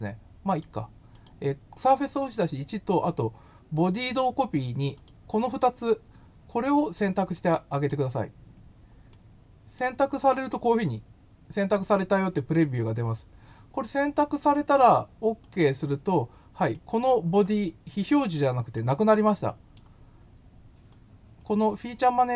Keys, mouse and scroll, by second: 0.4 click, 1.1 click, 4.9 click, 7.8 click, 9.1 middle click, 15.4 click, 16.7 middle click, 18.7-19.7 middle drag, 20.9-22.3 drag.